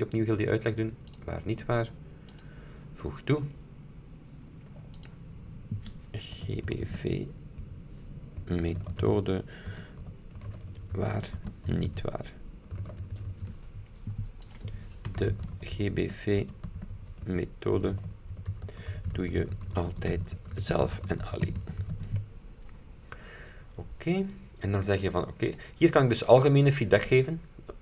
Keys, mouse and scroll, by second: 1.2 click, 2.4 click, 5.1 click, 6.3-13.8 typing, 14.6 click, 15.0-22.5 typing, 22.8-23.2 scroll up 2, 23.2-24.2 scroll down 2, 24.5 scroll up 2, 25.6 click.